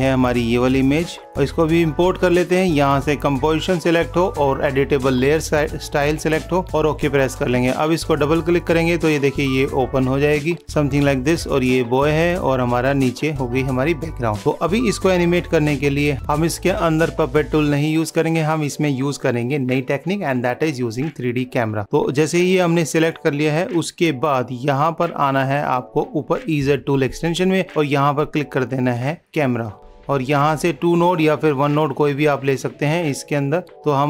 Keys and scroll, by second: 15.9 ctrl+s.